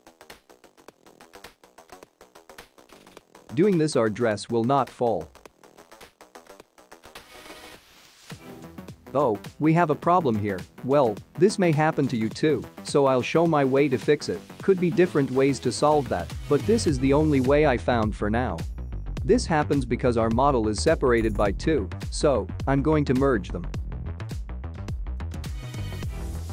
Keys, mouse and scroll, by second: 5.1 click, 6.0 middle click, 6.8-8.1 scroll down 6, 8.3 space, 9.4 space, 10.3 middle click, 12.9-13.3 scroll up 4, 13.7 shift+middle click, 15.0-15.8 scroll down 3, 16.0 click, 18.5 click, 20.1 middle click, 21.1 space, 21.8 space, 22.3 middle click, 22.8-23.6 scroll up 6, 23.6 middle click.